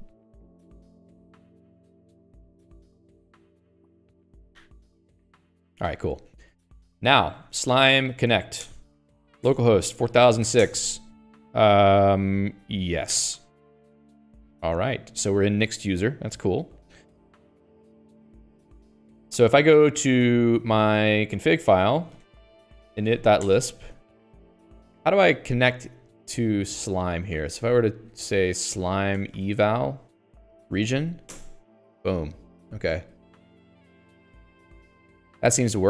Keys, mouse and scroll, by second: 5.0 Return, 6.7 Escape, 7.4 alt+x, 7.6-9.2 typing, 9.8 Return, 10.6 BackSpace, 10.8 6, 17.5 y, 18.4 click, 21.0 click, 21.3 ctrl+alt+k, 22.2 ctrl+g, 22.6 ctrl+alt+j, 23.1-24.0 typing, 24.3 Escape, 24.5 Escape, 27.5-30.5 typing, 31.2 Down.